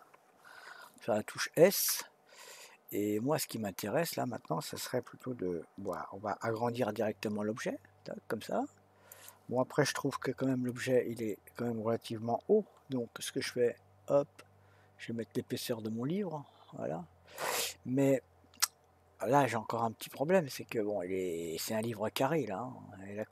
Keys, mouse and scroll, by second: 2.2 s, 10.6 s, 21.8-23.3 middle drag.